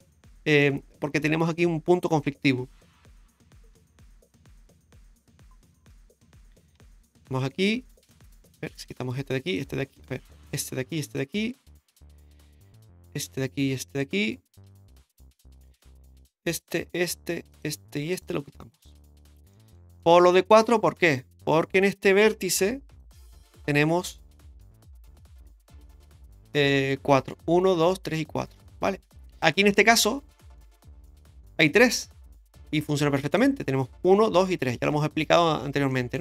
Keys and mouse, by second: 0.2 middle click, 3.7 k, 6.4 right click, 7.1 shift+right click, 7.9 shift+middle click, 8.8 right click, 9.5 shift+right click, 10.4 right click, 11.0 shift+right click, 11.9 x, 13.3 right click, 13.9 shift+right click, 14.6 x, 15.7 shift+right click, 16.6 shift+right click, 17.5 shift+right click, 18.1 shift+right click, 18.8 x, 19.5 middle click, 20.0 shift+middle click, 21.0 shift+middle click, 22.6 1, 22.9 right click, 23.4 middle click, 24.6 KP_Decimal, 25.9 middle click, 29.4 middle click, 30.4 shift+middle click, 31.1 middle click, 33.3 right click, 35.9 shift+middle click.